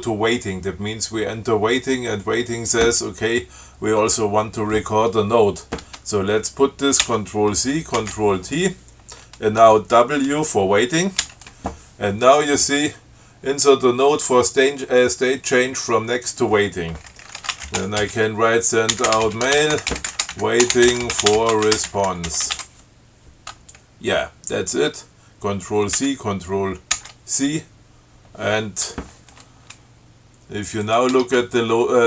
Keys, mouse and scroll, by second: 7.3 ctrl+c, 8.3 ctrl+t, 11.5 w, 17.6-23.4 typing, 26.3 ctrl+c, 27.2 ctrl+c, 31.1 click, 31.4 Tab.